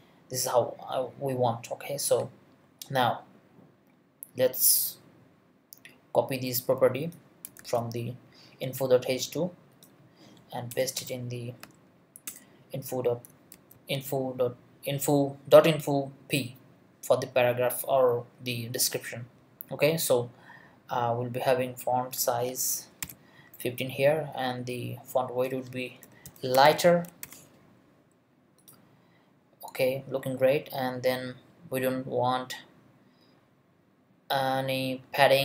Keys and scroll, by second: 7.6 super+c, 10.7 Return, 11.0 BackSpace, 11.6 Left, 12.3 Return, 13.3 super+Return, 13.5 super+v, 22.7-23.5 typing, 25.8-27.7 typing.